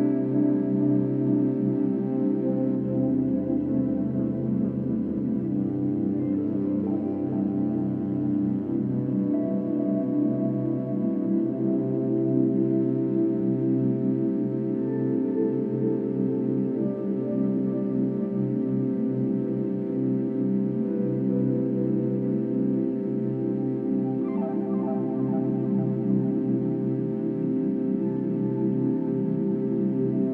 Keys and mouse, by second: 0.0 g, 0.4 x, 6.9 shift+click, 11.7 super+d, 11.7 click, 16.8 click, 18.3 click, 19.4 click, 21.8 click, 23.7 click, 23.9 click, 24.6 click, 27.7 click, 29.5 ctrl+c.